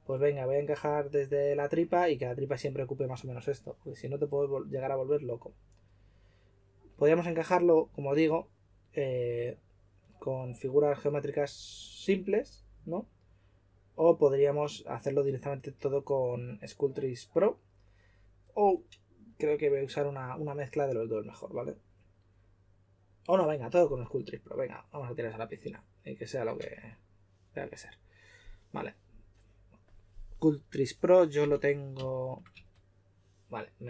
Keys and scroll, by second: 26.5 3, 31.3 typing, 32.5 typing.